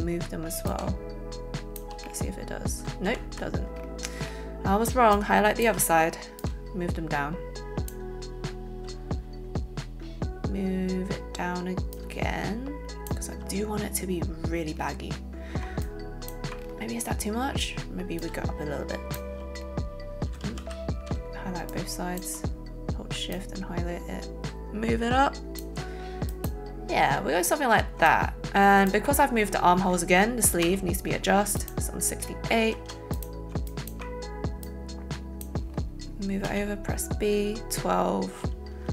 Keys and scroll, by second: 3.0 ctrl+z, 20.4 ctrl+z, 21.1 ctrl+shift+z, 30.6 b, 32.8 a, 33.4 alt+a, 36.5 b.